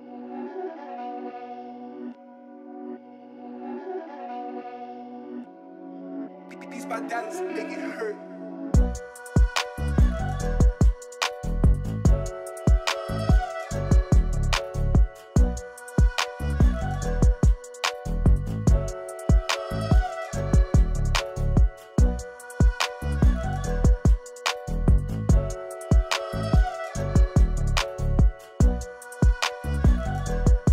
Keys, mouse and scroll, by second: 7.3 click, 7.5 ctrl+z, 9.9 click, 11.8 click, 14.4 click, 17.0 click, 19.0-19.4 scroll up 1, 19.4 space, 19.7 scroll up 1, 19.9 space, 20.0 click, 20.2 space, 21.0 click, 23.2 Right, 26.6 Left, 27.4 scroll down 1, 27.6-29.1 typing, 27.8 click, 28.2 scroll down 1, 28.6 click, 28.9 scroll up 1, 29.2 click.